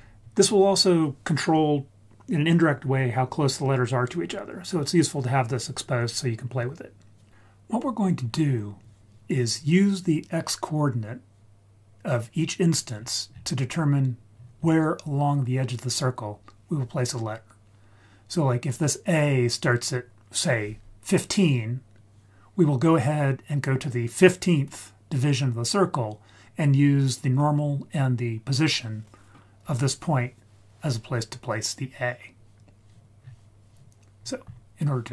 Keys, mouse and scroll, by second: 7.7-9.1 scroll up 4, 12.9-14.4 scroll down 4, 14.4-16.4 scroll up 3, 33.2-34.2 scroll down 2, 34.2-35.1 scroll up 4.